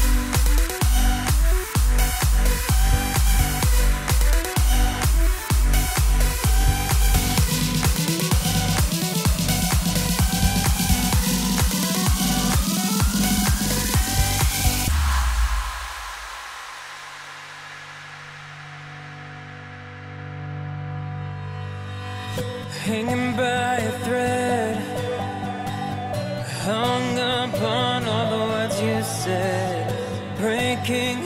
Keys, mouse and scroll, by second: 9.4-10.2 drag, 11.6 space, 18.2 space, 25.2 space, 26.5 click.